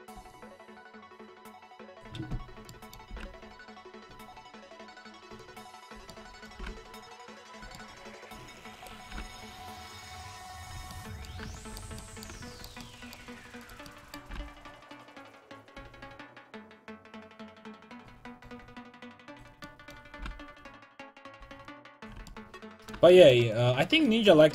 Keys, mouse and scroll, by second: 3.1 g, 5.9-7.5 right drag, 6.6 g, 7.6-8.8 drag, 8.8-10.6 right drag, 9.1 g, 10.7 a, 13.6-17.0 right drag, 14.3 g, 17.2 a, 18.1-19.3 middle drag, 19.3 right click, 20.2 g, 22.2 a.